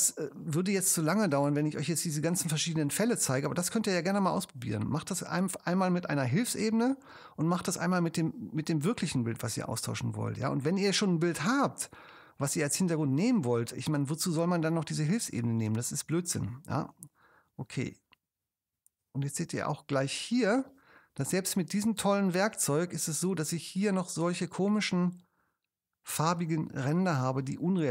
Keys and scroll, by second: 0.4 space, 14.0 super+space, 26.2 space.